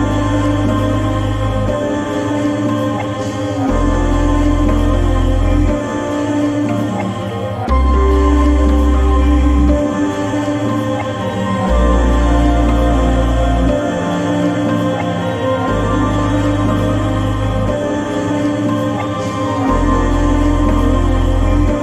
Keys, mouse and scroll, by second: 3.9-8.7 drag, 10.0 click, 10.7 ctrl+t, 11.3-19.5 drag.